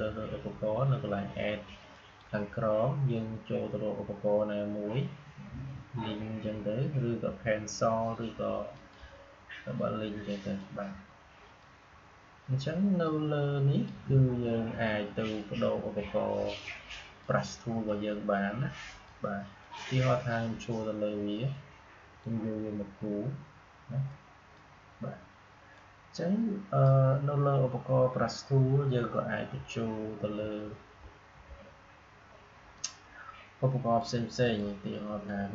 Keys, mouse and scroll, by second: 1.8 click, 8.6-16.6 drag, 16.6-30.9 drag, 30.9-32.6 scroll up 1, 32.6-35.5 drag.